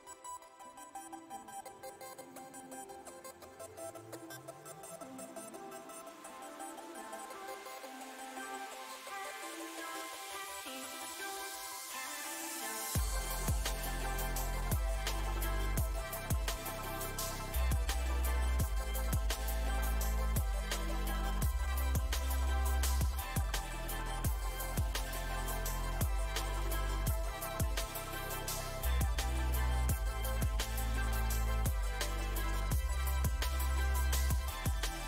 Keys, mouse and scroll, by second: 0.4 middle click, 1.1-2.3 drag, 2.3 middle click, 2.8-6.3 drag, 6.3-8.4 middle drag, 8.4 space, 9.2 f, 9.7-12.4 drag, 12.4 middle click, 12.8-17.8 drag, 17.8 middle click, 18.3-19.8 drag, 19.8-21.1 middle drag, 21.1 shift+c, 21.6 f, 22.6-24.8 ctrl+drag, 24.8 middle click, 25.4 click, 26.2 middle click, 27.0 f, 27.8-30.0 ctrl+drag, 30.0 middle click, 30.9 f, 31.6 middle click, 32.0-33.5 shift+drag, 33.5 f, 34.3 click.